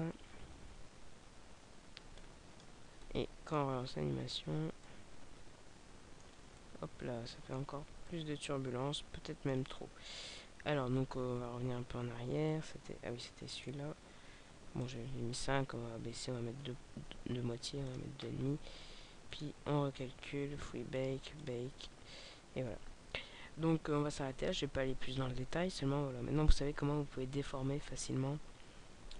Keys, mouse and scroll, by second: 2.1 click, 2.9 middle click, 3.7 alt+a, 4.8 middle click, 7.7 alt+a, 8.0 middle click, 12.4 middle click, 13.5 right click, 14.5 click, 19.4 right click, 21.0 click, 21.4 click.